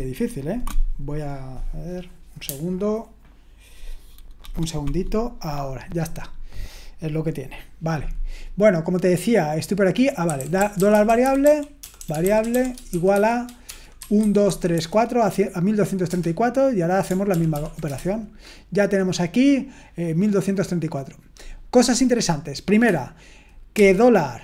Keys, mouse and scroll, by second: 10.3-14.7 typing, 16.1 Return, 17.3 ctrl+p, 17.5 ctrl+p, 17.8 Return, 23.7-24.4 typing.